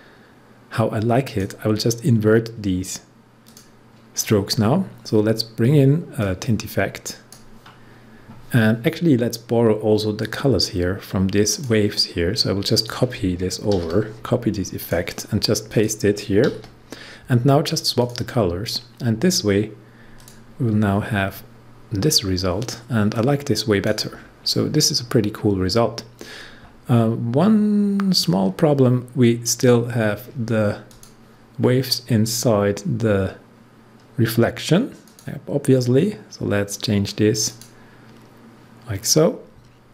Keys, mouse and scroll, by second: 6.1-9.8 drag, 10.1 click, 13.7 ctrl+c, 14.8 click, 16.4 ctrl+v, 17.9 click, 23.1 click, 23.2-26.5 drag, 30.8 click, 31.5 scroll down 1, 32.1 scroll down 1, 35.0 click, 37.4 click.